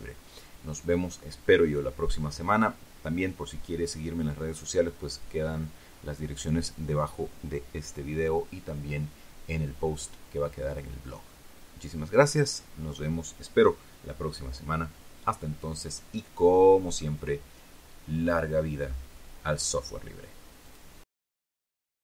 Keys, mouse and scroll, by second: 20.5 click, 21.9 click.